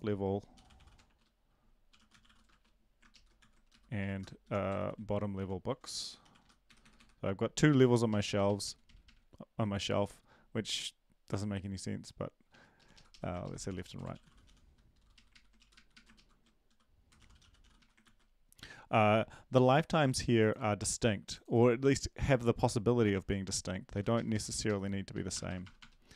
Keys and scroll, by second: 1.0-3.0 typing, 3.1 ctrl+shift+Left, 3.4 ctrl+c, 3.7 Down, 4.0 Left, 4.4 Home, 4.5-6.9 typing, 5.4 Home, 7.0 Delete, 7.8 ctrl+s, 8.1 Right, 8.3 Right, 8.4 Right, 13.1 Up, 13.1 Left, 13.4-14.9 typing, 15.1 Right, 15.5 Down, 15.7 Right, 15.9 Right, 17.8-18.6 typing, 24.5 Up, 24.5 Left, 25.1 Left, 25.1 Right, 25.3 BackSpace, 25.5 BackSpace, 25.6 BackSpace.